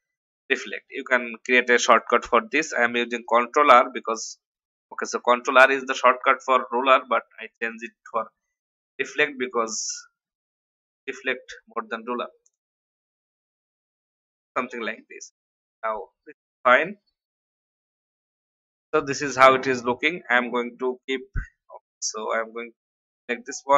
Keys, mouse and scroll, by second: 3.2 click, 6.1 shift+Right, 6.6 shift+Right, 7.0 shift+Right, 7.8 shift+Right, 9.0 Down, 9.1 Down, 9.3 Down, 9.5 Down, 10.1 Down, 12.6 Right, 13.4 Up, 15.7 alt+scroll down 1, 16.3 click, 17.7 F10, 19.7 click, 22.2 ctrl+z, 23.0 click.